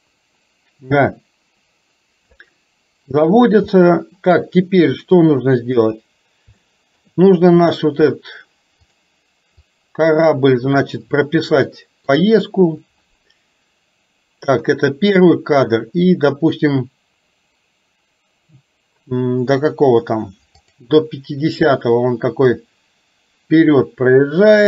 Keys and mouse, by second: 3.9 middle click, 5.2 KP_3, 6.7 middle click, 8.9 click, 9.8-10.9 drag, 11.7 shift+middle click, 20.7 click, 22.7-24.6 drag.